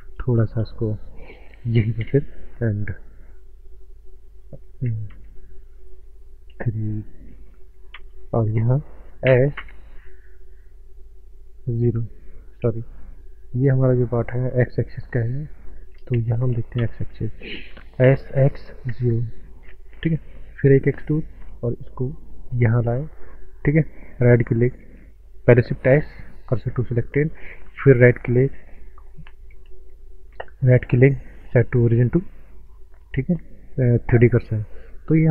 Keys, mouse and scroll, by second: 2.0 KP_4, 3.6 scroll down 1, 5.0 ctrl+space, 6.5 KP_3, 8.0 ctrl+space, 9.2 s, 9.5 z, 12.0 Num_Lock, 12.0 KP_0, 13.0 right click, 13.7 scroll down 1, 14.2 scroll up 1, 14.6 middle click, 16.1 ctrl+space, 18.0-18.9 typing, 19.0 KP_Enter, 20.7 e, 21.0 click, 25.9 shift+s, 26.4 shift+s, 26.6 shift+s, 27.8 right click, 29.6 Tab, 30.2 right click, 34.3 click.